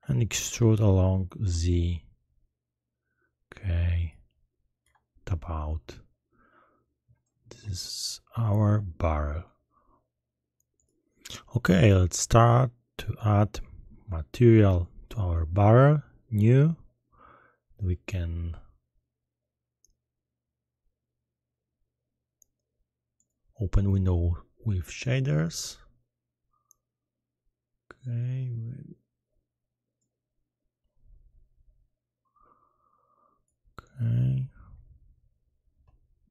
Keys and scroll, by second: 0.5 shift+e, 1.4 z, 4.8 Tab.